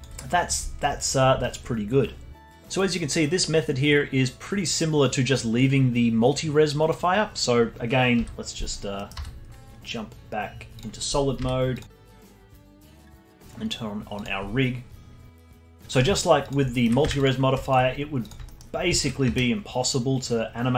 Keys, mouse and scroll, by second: 0.9-1.7 alt+middle drag, 1.7 scroll up 1, 8.9 middle click, 9.1 z, 11.4 z, 12.0-12.7 alt+middle drag, 12.7-15.0 alt+drag, 16.4 click, 16.7 alt+middle click, 17.0 Tab, 17.6-18.5 alt+drag, 18.5-18.9 alt+middle drag, 18.9-20.0 alt+drag, 20.0 r.